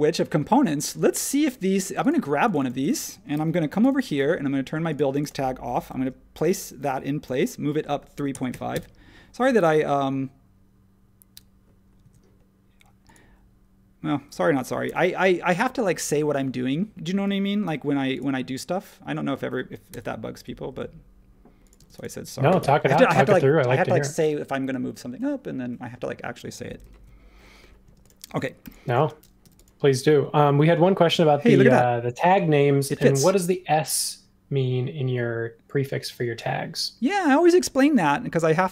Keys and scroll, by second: 0.9 space, 3.3 super+c, 5.9 shift+v, 7.2-9.0 typing, 12.0 super+z, 16.0 shift+space, 17.6 m, 21.8 shift+space, 22.6 BackSpace, 26.9 super+1, 27.8-29.4 typing.